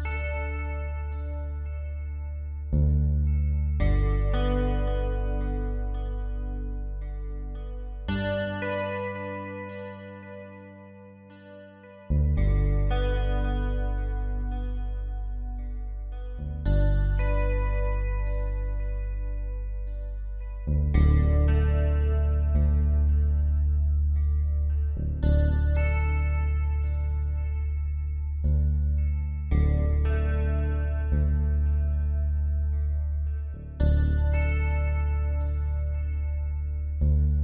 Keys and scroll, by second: 0.0-3.2 typing, 0.2 ctrl+z, 2.5 ctrl+z, 3.9 ctrl+z, 11.2 space, 21.2 ctrl+z, 21.7 ctrl+j, 34.8 space.